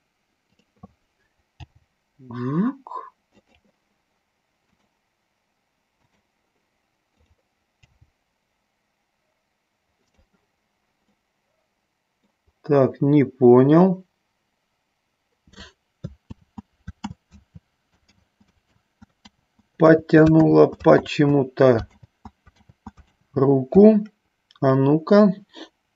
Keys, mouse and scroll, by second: 1.9 g, 4.9 click, 6.3 click, 7.3 click, 9.2 g, 10.3 click, 11.4-12.5 middle drag, 16.8 ctrl+z, 17.5 ctrl+z, 19.7 ctrl+z, 21.5 ctrl+z, 22.4 ctrl+z, 23.5 ctrl+z.